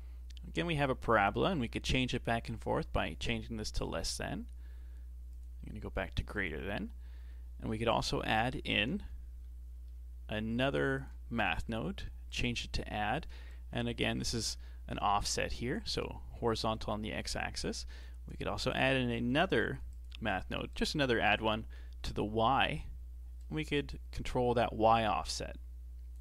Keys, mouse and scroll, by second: 2.0-5.0 drag, 5.3-7.9 drag, 9.7 shift+d, 11.6-16.5 drag, 18.7 click, 19.2 shift+d, 20.7-26.2 drag.